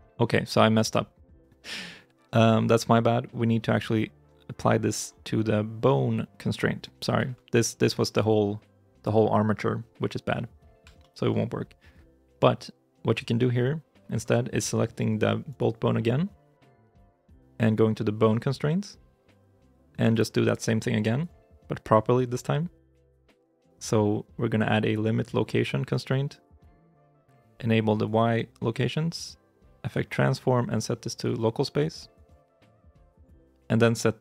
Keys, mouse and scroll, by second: 0.4 ctrl+z, 10.2 middle click, 10.4 scroll down 1, 10.8 shift+middle click, 13.0 right click, 15.3 right click.